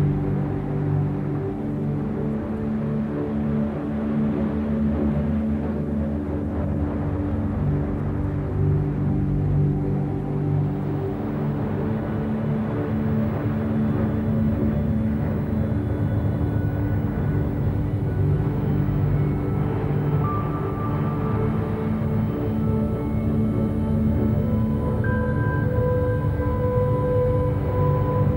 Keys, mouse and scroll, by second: 0.3 Tab, 0.6-0.9 middle drag, 0.9 scroll down 1, 1.7 KP_7, 3.2 s, 5.6-6.3 scroll up 1, 6.3 g, 9.3-11.6 scroll down 2, 9.6 a, 11.6-13.0 scroll up 6, 13.0 click, 13.3-13.7 scroll up 1, 13.7 z, 13.9-14.3 scroll up 1, 14.3 g, 15.5-15.8 scroll down 2, 15.8-16.1 middle drag, 16.1 z, 16.4-16.8 middle drag, 16.8 a, 17.0 a, 17.1-18.9 middle drag, 18.9-19.3 scroll down 2, 19.3-20.4 shift+middle drag, 20.4-20.8 scroll down 2, 20.8-22.1 shift+middle drag, 22.1 KP_7, 23.2-24.9 middle drag, 24.9-25.3 scroll up 1, 25.3-26.4 shift+middle drag, 26.4-26.7 scroll down 1, 26.7-27.5 middle drag, 27.5-28.3 scroll up 2.